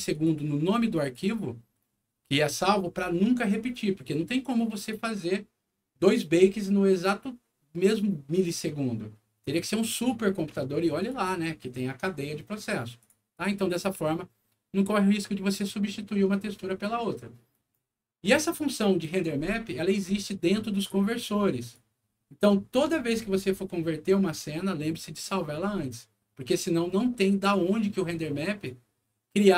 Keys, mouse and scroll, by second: 0.1 click, 0.9 click, 4.7 click, 9.4 click, 10.9 click, 12.9 click, 17.5 click, 21.6 click, 28.4 click.